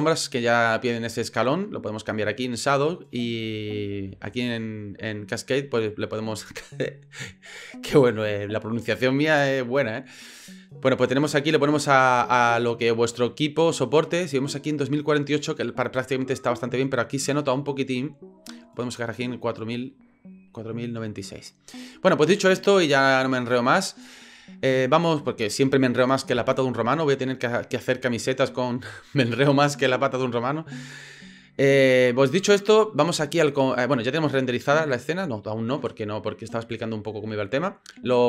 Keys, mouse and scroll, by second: 11.9-13.1 drag, 18.1-19.4 drag.